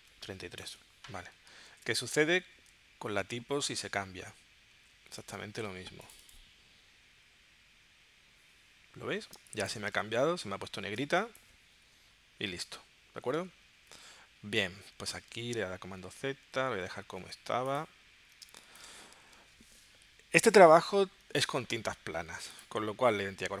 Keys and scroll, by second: 1.7 super+s, 4.7 super+Tab, 9.4 space, 11.0 space, 13.9 super+w, 15.5 super+z, 18.5 space, 19.3 super+s.